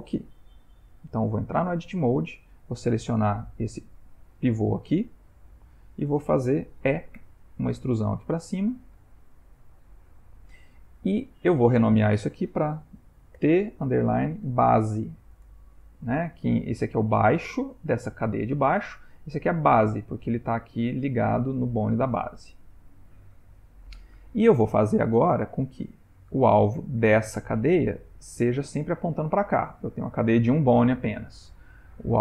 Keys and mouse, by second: 0.0 ctrl+middle click, 1.2 click, 1.7 Tab, 2.7 click, 3.4 g, 4.3 click, 4.8 g, 7.2 e, 10.0 click, 12.0 F2, 21.0 ctrl+middle click, 24.3 Tab, 25.7 click, 31.4 click.